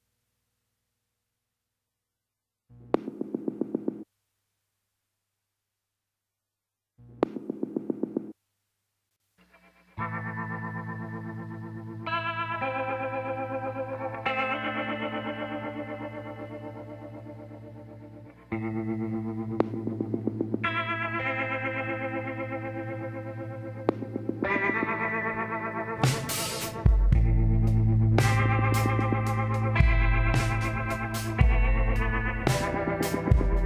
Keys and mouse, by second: 1.2 s, 3.4-5.2 drag, 5.2 s, 11.9-13.6 middle drag, 15.7-17.5 middle drag, 17.8 s, 19.2-20.9 drag, 21.1-23.6 drag, 24.4-25.8 middle drag, 25.8-27.4 drag, 27.4 KP_1, 27.4 click, 30.1 middle click, 32.7 e.